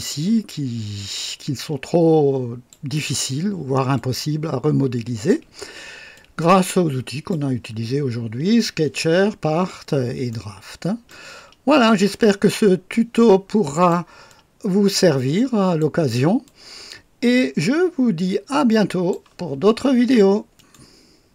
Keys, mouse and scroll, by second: 3.8 click, 6.0-7.4 drag, 10.2-11.2 right drag, 12.8-14.0 drag, 14.2-15.9 drag, 16.4-19.2 drag, 20.5 right click, 21.2 click.